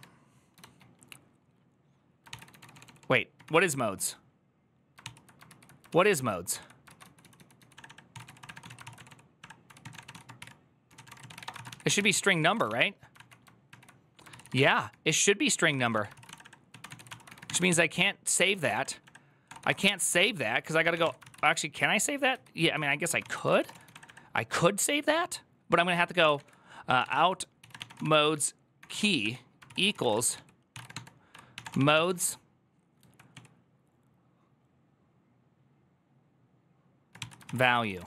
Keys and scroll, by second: 0.0-0.3 typing, 2.0-3.7 typing, 4.8 ctrl+c, 5.3 ctrl+u, 5.6-12.9 typing, 14.3 ctrl+:, 14.4-16.2 typing, 17.5 ctrl+c, 20.9-24.1 typing, 25.7-26.6 typing, 28.8 typing, 30.9-32.2 typing, 33.6-34.4 typing, 37.5-38.0 typing.